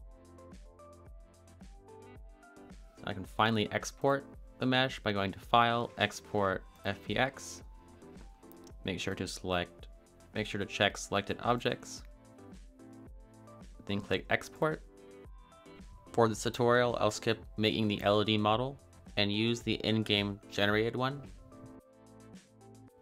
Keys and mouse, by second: 0.2 click, 0.6 click, 0.9 middle click, 1.4 a, 1.7 click, 2.3 a, 2.4 middle click, 2.5 Tab, 3.7-5.5 drag, 5.7-7.6 drag.